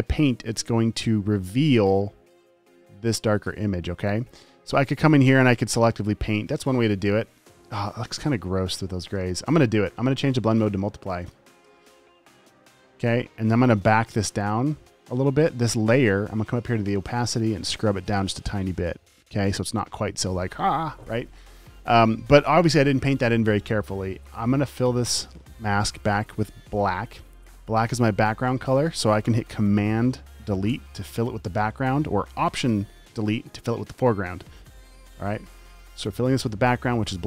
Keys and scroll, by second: 31.0 super+BackSpace.